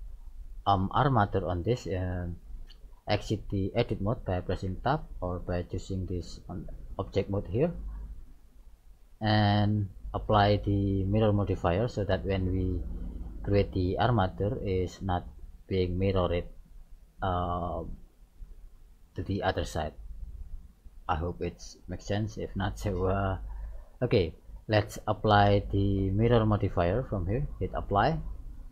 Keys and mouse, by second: 4.8 Tab, 6.0-8.0 drag, 8.0-10.0 middle drag, 11.6-13.5 middle drag, 14.2-16.1 middle drag, 16.8-18.9 middle drag, 20.1-22.3 middle drag, 23.0-24.7 middle drag, 27.8-28.7 drag.